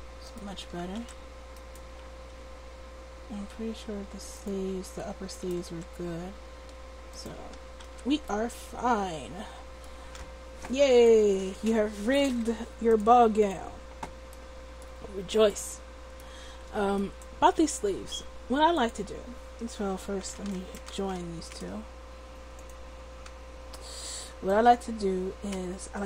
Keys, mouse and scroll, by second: 0.5 a, 0.7 a, 1.0 alt+r, 2.3 r, 5.3-7.2 drag, 5.7 r, 7.3 a, 7.5 a, 7.9 alt+r, 13.5-14.7 drag, 19.1-20.5 drag, 22.5-24.3 drag.